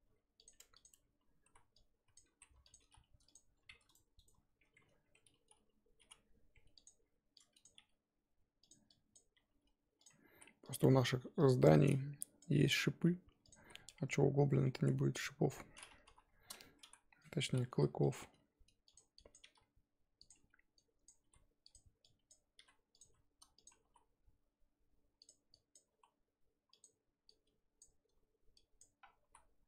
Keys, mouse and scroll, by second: 0.6 Tab, 0.7 click, 0.9 Tab, 1.4 z, 1.7 click, 2.3 s, 3.9-6.0 ctrl+right drag, 6.0 m, 7.3 click, 7.8 g, 8.9 click, 9.3 g, 10.8 r, 12.2 click, 12.7 r, 13.5 z, 13.8 scroll down 1, 13.9 middle click, 14.8 Tab, 15.2 middle click, 15.7-16.0 scroll up 1, 16.0 KP_3, 16.3-16.6 scroll up 4, 16.6 Tab, 16.8 z, 17.2 click, 17.7 r, 18.2 g, 19.2 click, 19.4 g, 20.7 click, 21.2 r, 22.0 click, 22.6 r, 23.0 g, 25.5 click, 25.9 s, 27.2 click, 28.5 click, 29.0 scroll down 2, 29.2 s.